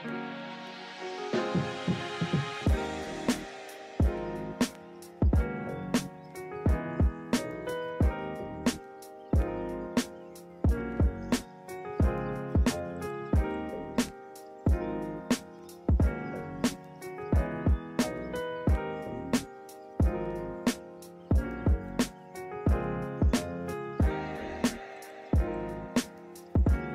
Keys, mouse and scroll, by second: 1.2 ctrl+z, 1.3 right click, 4.6 ctrl+=, 15.1 ctrl+z, 16.6 ctrl+z, 23.7 ctrl+z, 26.0 ctrl+z.